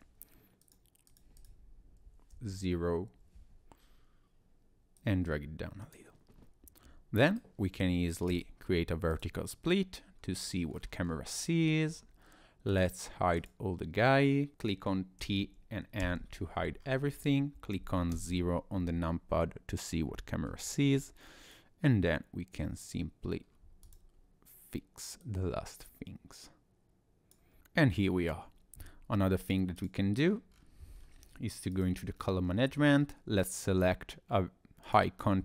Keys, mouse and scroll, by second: 0.6 click, 1.4 click, 5.0 click, 7.3 right click.